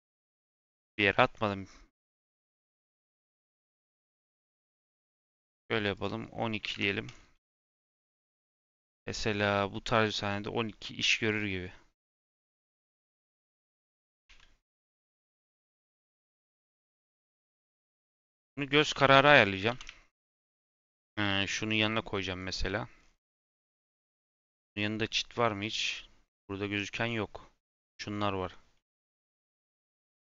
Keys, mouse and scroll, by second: 0.2 scroll down 1, 0.4 scroll up 3, 1.0-3.0 shift+middle drag, 3.0 shift+a, 5.9-7.1 drag, 7.4-7.8 scroll down 3, 7.8-9.1 scroll up 2, 11.5 scroll up 2, 14.2 s, 15.2 s, 17.6 g, 18.7 g, 20.7 g, 21.7 s.